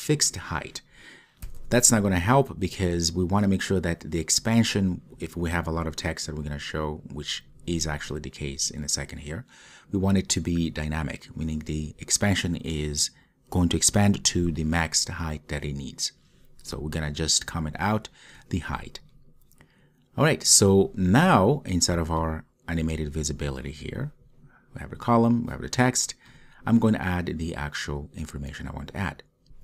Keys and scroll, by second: 29.5 super+z.